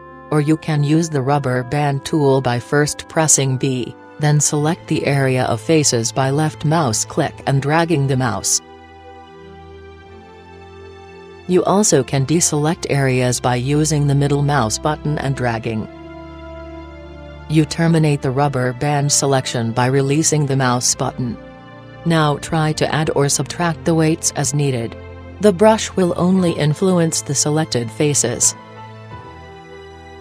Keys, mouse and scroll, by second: 0.0-1.8 right drag, 3.2 b, 4.9 b, 10.0-12.4 middle drag, 12.8 b, 16.2 b, 17.4 b, 24.9-26.8 drag, 27.3-30.2 drag.